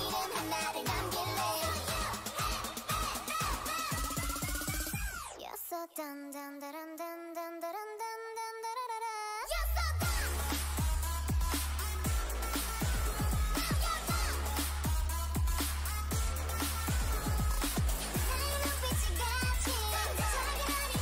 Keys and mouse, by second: 1.6 Tab, 2.2 KP_7, 3.6 ctrl+Tab, 4.6 right click, 4.8 g, 6.8 g, 8.1 g, 9.8 g, 10.7 g, 12.3 g, 13.7-18.2 drag, 13.7 g, 14.8 g, 15.6 g, 17.1 Tab, 18.9 Tab, 20.5 click.